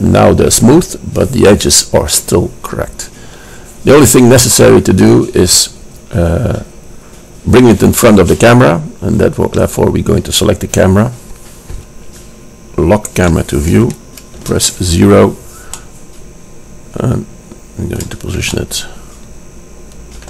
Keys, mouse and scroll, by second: 9.6-11.5 drag, 11.6 click, 11.9-13.4 middle drag, 13.4-14.6 drag, 14.6 KP_0, 15.4-16.4 middle drag, 18.0 middle click.